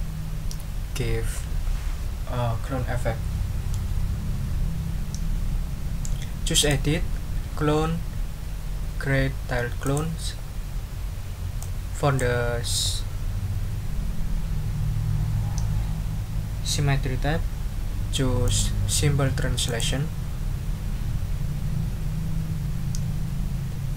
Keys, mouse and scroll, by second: 6.6 click, 9.8 click, 11.6-12.3 drag, 18.4 click, 19.6 click.